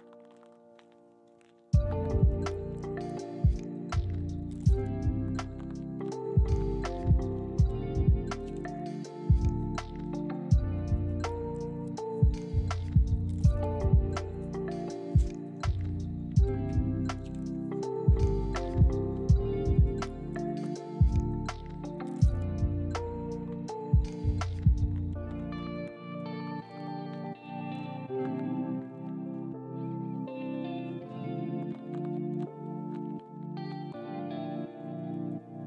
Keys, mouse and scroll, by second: 1.3 1, 2.0-2.4 scroll up 1, 2.7 shift+middle click, 3.2 shift+scroll up 2, 3.6 shift+middle click, 6.2 g, 8.3 ctrl+click, 9.6 g, 10.7 ctrl+click, 11.4 g, 13.1 ctrl+click, 17.7 r, 20.2 ctrl+click, 20.5 g, 22.4 ctrl+click, 23.0 r, 23.9 ctrl+click, 24.3 g, 27.4 ctrl+click, 29.5 shift+d, 30.1 ctrl+click, 30.4 ctrl+r, 31.7 ctrl+click, 32.0 g, 33.3 ctrl+click, 34.4 r.